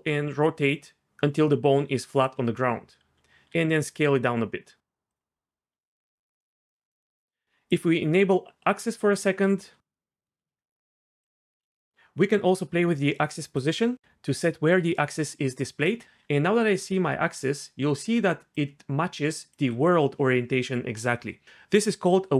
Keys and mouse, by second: 3.5 s, 5.1 click, 7.7 click, 13.7-15.8 drag, 16.0 d, 16.2-17.9 d.